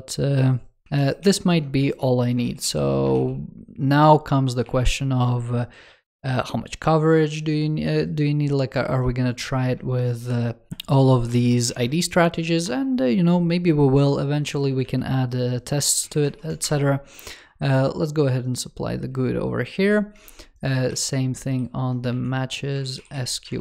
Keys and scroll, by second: 0.8 ctrl+s, 1.7 super+c, 2.3 ctrl+s, 3.0 ctrl+s, 4.5 super+v, 14.7 super+c, 16.1 super+v, 20.6 ctrl+s, 22.0 super+c, 23.4 super+v.